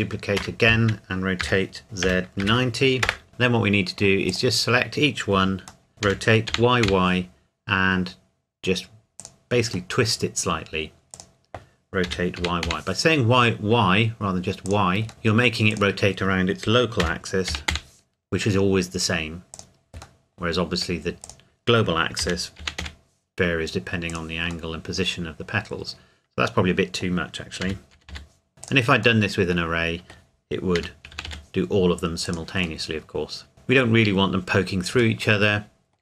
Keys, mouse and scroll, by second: 0.4 Escape, 1.4 r, 2.0 z, 2.4 KP_9, 3.1 KP_Enter, 3.3 middle click, 4.3 click, 5.9 middle click, 6.0 r, 6.5 y, 9.2 click, 9.8 middle click, 11.1 click, 12.0 r, 12.4 y, 14.7 click, 15.1 middle click, 15.7 click, 17.0 r, 17.5 y, 19.5 click, 20.2 middle click, 21.3 click, 22.2 r, 22.6 y, 24.1 click, 24.7 middle click, 27.6 r, 27.9 y, 28.5 click, 29.2 middle click, 30.7 r, 31.1 y, 32.3 click, 32.8 middle click, 35.5 middle click.